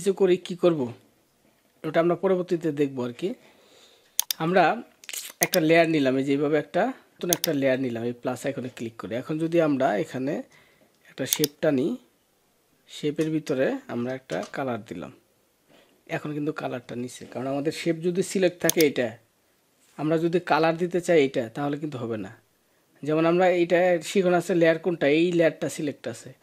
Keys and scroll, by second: 14.1 alt+BackSpace.